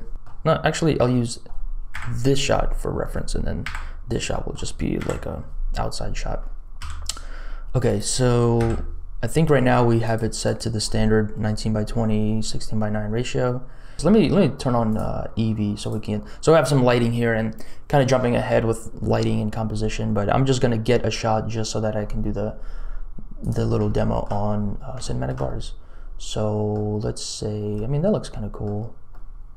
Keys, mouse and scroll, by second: 0.1 click, 1.9 KP_0, 3.6 KP_0, 4.3 click, 4.9 KP_Decimal, 6.7 m, 8.5 n, 10.0 click, 10.4 click, 14.9 click, 23.5 click, 23.8 shift+click, 25.1 shift+click, 25.1 shift+middle click, 25.4-26.7 middle drag, 27.8 middle click, 29.1 middle click.